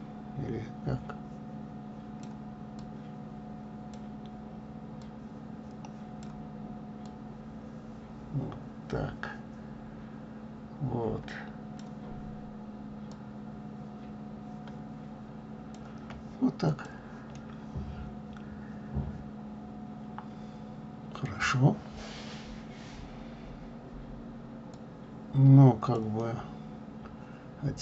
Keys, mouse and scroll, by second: 3.1-10.2 drag, 13.2-16.6 drag, 17.6-20.4 middle drag, 25.1-26.4 drag, 26.4-27.2 scroll down 2.